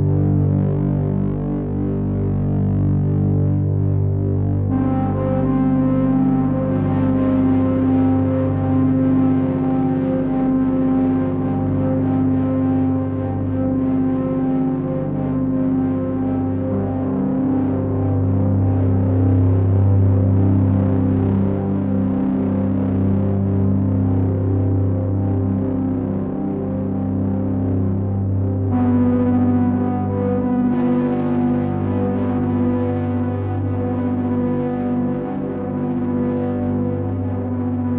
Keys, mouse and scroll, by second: 1.9 click, 7.0 click, 11.9 click, 26.7 click, 27.5 click, 31.6 click, 35.0 click.